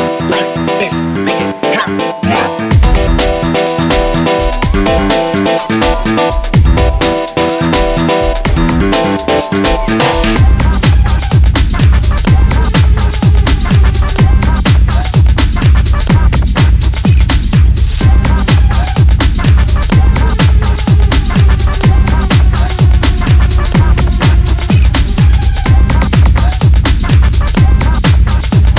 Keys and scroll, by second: 1.0 1, 4.2 shift+Tab, 6.6 a, 11.6 a.